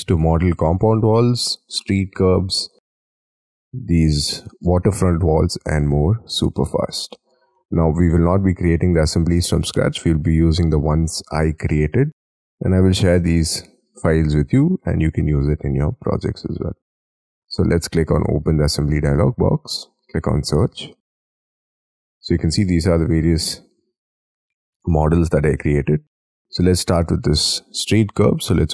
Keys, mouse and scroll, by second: 7.6 middle click.